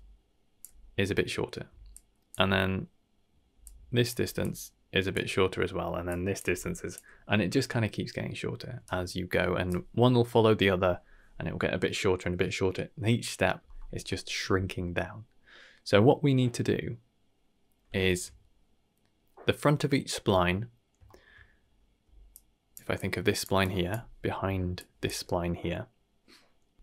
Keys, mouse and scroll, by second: 0.6 d, 1.6 d, 1.9 click, 2.3 d, 3.6 click, 4.0 d, 4.4-5.1 drag, 5.1 d, 5.1 d, 6.0 click, 6.3 d, 6.5 d, 6.5-6.9 drag, 7.0 d, 8.8 right click, 14.0 middle click, 18.0 shift+middle click, 21.0 shift+middle click, 22.0-25.1 typing, 22.3 click, 22.9 click, 23.6 click, 24.7 click, 26.6 d, 26.7 right click, 26.7 d.